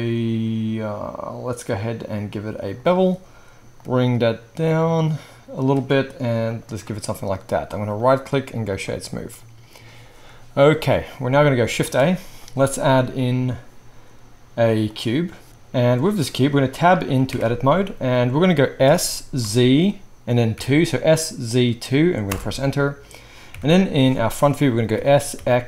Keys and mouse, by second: 8.0-15.5 middle drag, 8.0-9.3 right drag, 11.7 shift+a, 15.5-25.6 right drag, 17.3 Tab, 18.8 s, 23.5 KP_1, 24.9 s.